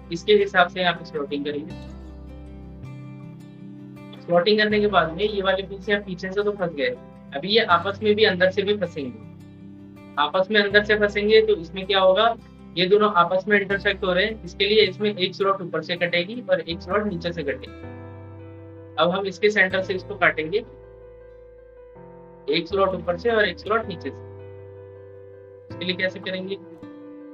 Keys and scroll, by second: 0.9 ctrl+z.